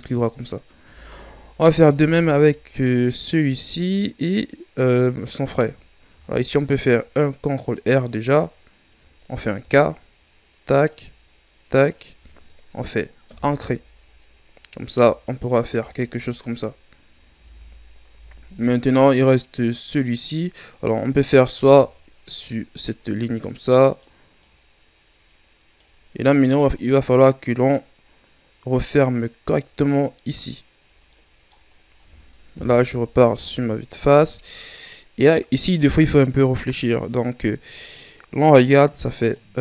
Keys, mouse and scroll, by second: 0.9 Tab, 1.6 middle click, 1.6 scroll up 1, 1.9 Tab, 1.9 middle click, 2.3-5.4 scroll up 2, 6.1 ctrl+r, 8.5-9.6 scroll up 2, 9.6 k, 14.2-15.2 scroll down 4, 15.2 alt+right click, 16.0-16.9 scroll down 5, 16.9-17.4 scroll up 7, 17.4 Tab, 17.8-18.1 scroll up 2, 18.1 Tab, 21.6 ctrl+r, 23.9-27.4 right drag, 30.8 scroll down 2, 31.1 middle click, 31.7-32.5 scroll down 1, 32.5 KP_1, 33.3-34.1 scroll up 9, 34.1-34.6 ctrl+scroll down 3, 34.6-37.6 scroll up 1, 39.2-39.6 right drag.